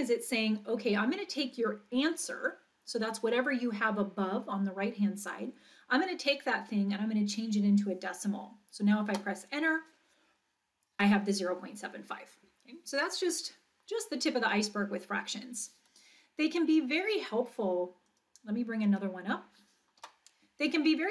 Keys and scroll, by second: 9.1 Return, 20.0 Return.